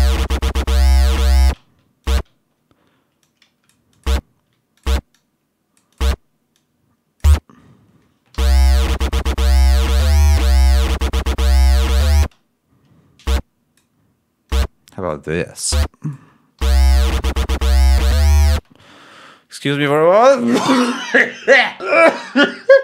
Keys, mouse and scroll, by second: 0.9 ctrl+scroll down 1, 1.4 ctrl+space, 1.9 ctrl+click, 2.3 ctrl+scroll up 2, 4.4 d, 5.0-6.1 drag, 6.4 click, 8.2 l, 8.9 ctrl+scroll down 2, 10.9 scroll down 2, 11.7 ctrl+scroll up 1, 12.1 ctrl+space, 15.6 click, 16.5 l, 17.1 ctrl+scroll down 2, 18.4 space.